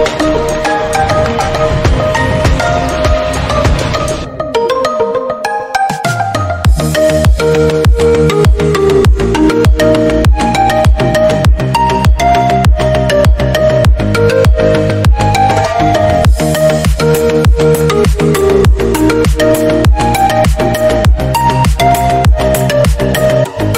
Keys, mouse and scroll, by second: 0.0 click, 0.6-1.8 middle drag, 2.0 click, 2.4 middle click, 3.0 click, 3.6 Tab, 3.7 middle drag, 4.0 scroll down 2, 4.1-5.1 middle drag, 5.1 scroll up 1, 5.2-6.4 middle drag, 6.8-7.2 shift+middle drag, 7.2 scroll up 2, 7.4-8.3 middle drag, 8.3 Tab, 8.6 scroll down 1, 8.8 shift+middle click, 9.6 scroll down 1, 9.8-10.8 scroll up 5, 10.2 shift+middle click, 10.8-12.0 drag, 12.1 click, 12.7 /, 12.9 scroll down 1, 13.1 click, 13.3 scroll up 1, 13.5-14.7 middle drag, 15.2 shift+middle click, 15.4 scroll up 2, 15.7 middle click, 16.6-17.1 scroll up 1, 17.1-17.6 scroll down 6, 17.6-18.6 shift+middle drag, 18.6 ctrl+r, 19.8-20.9 middle drag, 20.9 click, 21.4 KP_Decimal, 21.7-22.1 scroll down 6, 22.1 middle click, 22.5 middle click, 22.7 click, 23.1-23.4 scroll down 3, 23.4 shift+middle click.